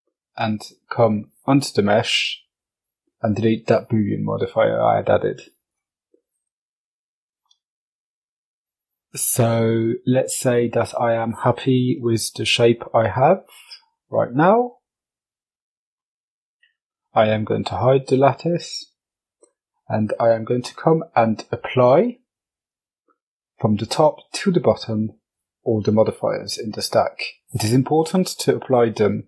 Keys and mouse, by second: 3.0 click, 8.7 right click, 13.3-13.8 middle drag, 14.4 h, 14.9 middle drag, 16.9 click, 19.8 click.